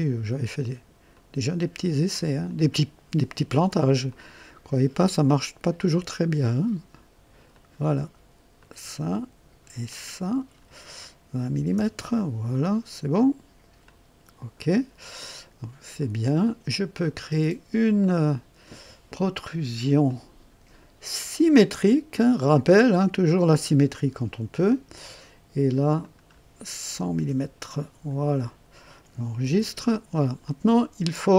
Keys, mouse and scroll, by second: 1.1 click, 2.4 click, 4.0 click, 5.2 click, 5.9 click, 7.4 click, 8.5 click, 9.8 click, 11.5 KP_2, 11.7 KP_0, 11.9 KP_Enter, 13.8-14.8 drag, 15.9 click, 17.0 click, 20.0 click, 22.1 click, 23.3 click, 25.9 click, 26.8 KP_0, 27.1 KP_Enter, 29.4 ctrl+s, 30.4 ctrl+click.